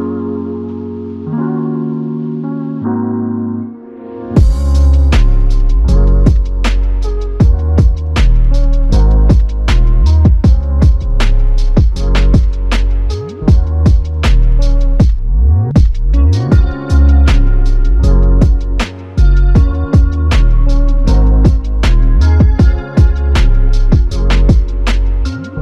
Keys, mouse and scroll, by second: 0.3 w, 1.5 alt+click, 7.6 ctrl+click, 12.3 alt+click, 14.3 ctrl+click, 20.4 ctrl+click, 21.4 ctrl+click, 23.6 q.